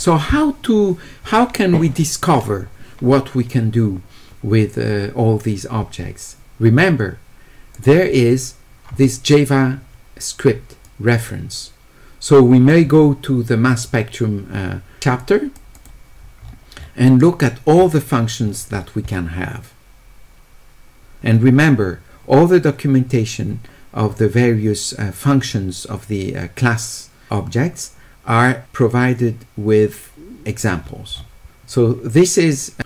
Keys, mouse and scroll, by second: 7.7 click, 10.8-12.7 drag, 14.6 middle click, 14.6 scroll down 1, 15.2 click, 15.7 click, 16.4 middle click, 16.8 middle click, 17.8 middle click, 18.4 middle click, 19.1-21.0 middle drag, 24.1 middle click, 28.6-30.4 drag, 30.9 middle click, 30.9 scroll down 1, 31.1 middle click, 31.1 scroll up 1, 31.3 scroll down 1.